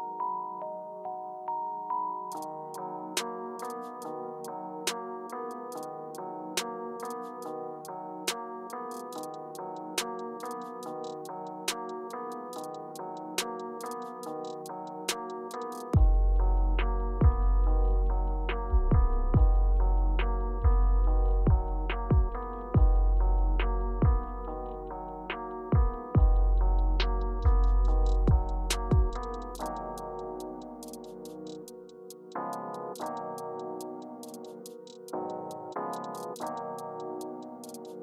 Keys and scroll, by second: 5.8 Up, 6.3 Up, 9.3 Return, 12.0 shift+Up, 13.4 Down, 13.7 Up, 14.1 Return, 16.2 shift+Page_Up, 16.6 Down, 17.2 Down, 21.1 Return, 27.4 Page_Up, 28.3 Return, 29.9 k.